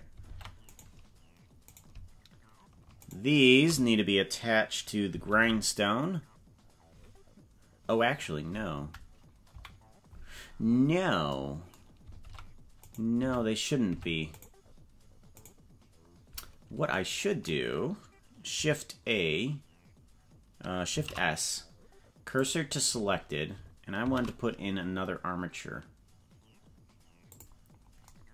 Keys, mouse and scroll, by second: 0.3 ctrl+Tab, 0.7 right click, 1.7 right click, 3.0 shift+right click, 5.3 ctrl+p, 9.5 KP_Decimal, 10.5-11.1 scroll down 9, 12.3 ctrl+Tab, 13.2 Tab, 13.9 Tab, 14.3 right click, 15.3 right click, 21.0 shift+s, 24.0 shift+a.